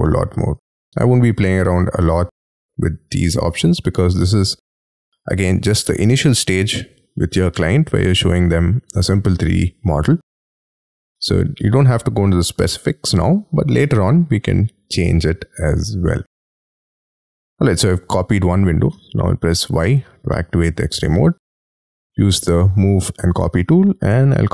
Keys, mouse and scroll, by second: 4.3 middle click, 5.7-6.3 scroll down 8, 6.3 middle click, 8.0-8.3 scroll down 5, 10.3 middle click, 12.6-13.3 scroll up 11, 17.4 scroll down 6, 18.1 middle click, 19.0 y, 19.2-19.6 scroll down 5, 19.6-20.3 scroll up 11, 20.3 middle click, 21.3 scroll down 1, 21.8 m, 23.1-23.7 scroll down 9, 23.7-24.3 scroll up 11.